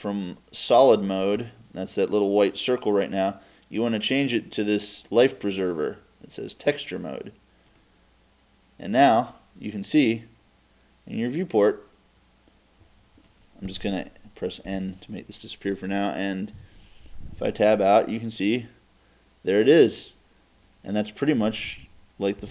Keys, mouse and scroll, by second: 11.7-13.4 drag, 14.7 n, 16.6 Tab, 18.3-22.5 middle drag.